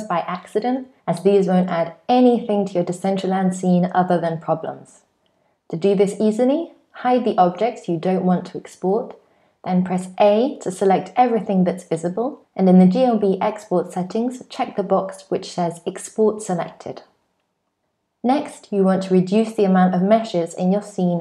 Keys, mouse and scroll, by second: 1.9 click, 3.2 shift+click, 4.7 shift+click, 5.6 shift+click, 6.5 shift+click, 7.4 shift+click, 8.5 h, 9.9 a, 12.2 click, 17.8 click, 18.4 click, 19.4 shift+click, 20.1 shift+click.